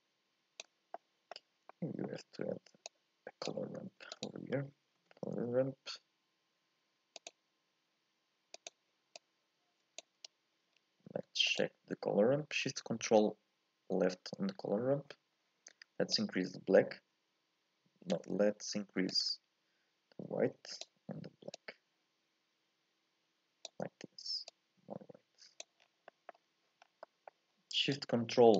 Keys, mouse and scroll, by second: 13.5 ctrl+shift+click, 14.6-15.4 scroll up 1, 15.4-16.2 scroll up 1, 16.2 scroll up 1, 16.3-28.1 drag.